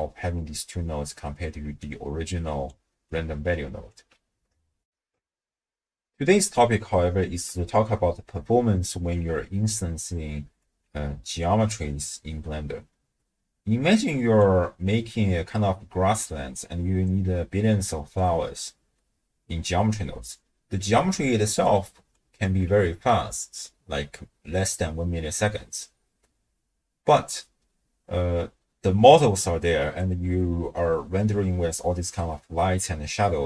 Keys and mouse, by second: 1.7-3.0 d, 1.8 click, 3.1 click, 3.9 d, 4.0 d, 4.8 ctrl+alt+shift+w, 5.0 ctrl+alt+shift+q, 10.1 d, 10.3 right click, 10.6 d, 10.6 d, 10.7 d, 11.4-14.4 drag, 19.1 middle click, 19.2 click, 19.3 middle click, 19.4 click, 21.1-22.5 d, 21.6 click.